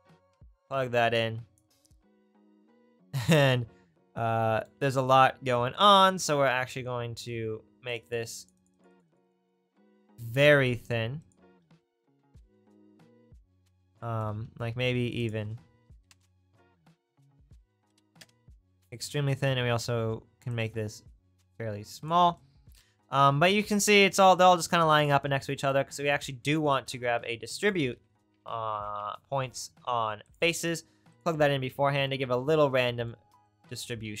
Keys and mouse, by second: 0.0 click, 10.9 click, 26.7 shift+a, 31.3-34.2 right drag.